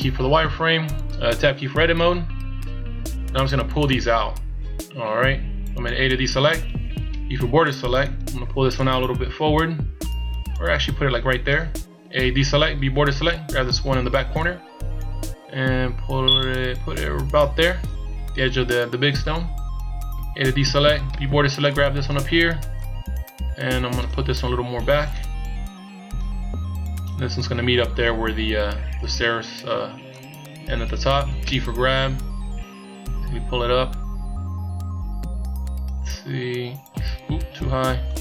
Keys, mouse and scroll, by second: 2.1 Tab, 2.8-3.3 scroll up 2, 6.2 a, 7.1 b, 8.8 click, 11.6 click, 12.3 a, 12.8 b, 14.4 click, 20.2 a, 21.0 b, 22.7 click, 25.1 click, 29.2 a, 29.5 b, 31.4 g.